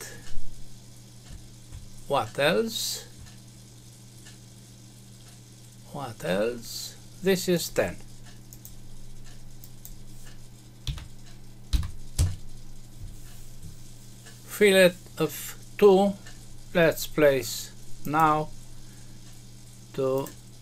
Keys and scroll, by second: 12.1 Return.